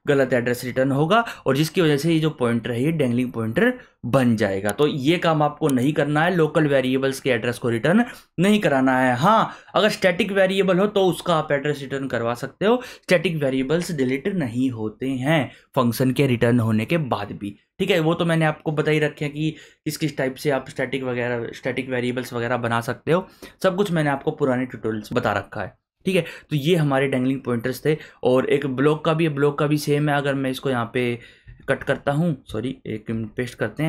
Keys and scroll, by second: 31.6 ctrl+x, 33.1 ctrl+v.